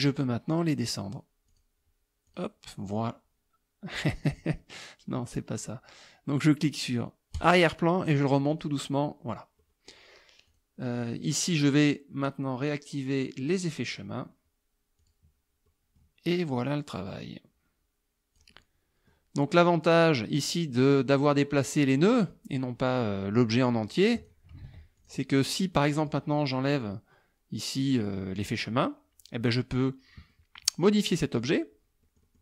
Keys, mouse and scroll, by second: 0.2 click, 1.5 click, 2.3 click, 7.4 click, 8.5 click, 9.6 middle click, 10.5 click, 13.5 click, 15.0 click, 15.7 middle click, 16.7-18.6 drag, 20.8 click, 23.6-24.5 drag, 24.7 ctrl+z, 25.0 ctrl+click, 25.6 click, 28.5 click, 30.3 click, 31.4 click, 32.1 click.